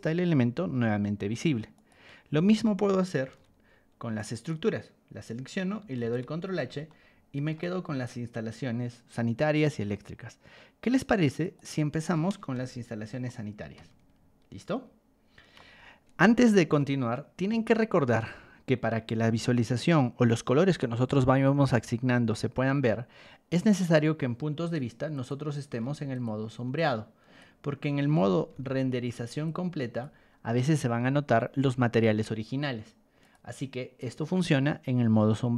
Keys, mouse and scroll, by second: 1.7 click, 3.2 ctrl+h, 4.3 click, 5.9 ctrl+h, 6.8 shift+middle click, 7.7 middle click, 8.0 middle click, 8.1 scroll up 2, 11.4 click, 12.5 ctrl+h, 13.2-15.5 middle drag, 15.6 scroll up 1, 16.7 middle click, 23.8 click, 25.1 click, 25.8 ctrl+1, 26.1 click, 26.7 ctrl+click, 28.5 b, 29.4 ctrl+click, 32.0 Escape, 33.2 click.